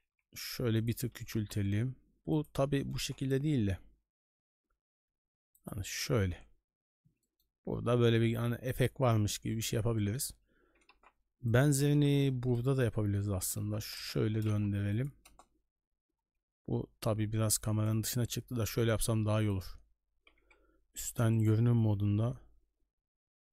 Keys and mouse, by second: 0.0 s, 1.1 r, 2.6 g, 7.2 shift+middle drag, 8.4 n, 9.6 right click, 10.0 middle drag, 10.6 shift+d, 11.7 r, 13.4 r, 14.2 g, 15.2 KP_0, 17.6 click, 18.9-19.6 drag, 20.3 KP_7, 21.5 middle click, 21.9 g.